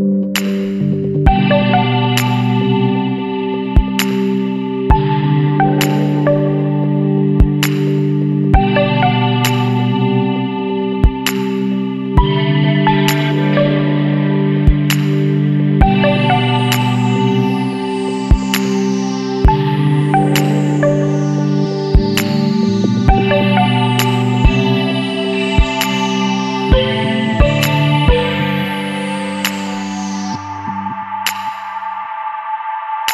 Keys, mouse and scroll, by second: 1.3 click, 4.7 click, 6.7 click, 8.6 Escape, 9.5 click, 11.3-13.3 scroll down 4, 14.0 scroll down 1, 16.2 click, 17.7 click, 20.7 click, 22.9 click, 24.5 KP_5, 24.8 KP_3, 25.2 KP_Enter, 26.6 click, 27.7 KP_Subtract, 28.2 KP_4, 28.9 KP_3, 29.4 KP_Enter, 31.3-32.2 scroll up 4.